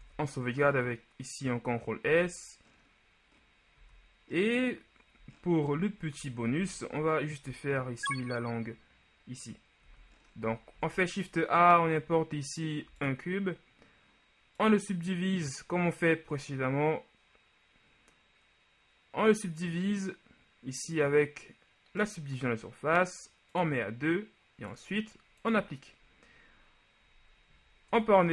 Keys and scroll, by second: 0.0 ctrl+s, 2.2 z, 6.7 shift+z, 7.2 shift+z, 10.0 z, 10.9 shift+a, 28.1 Tab.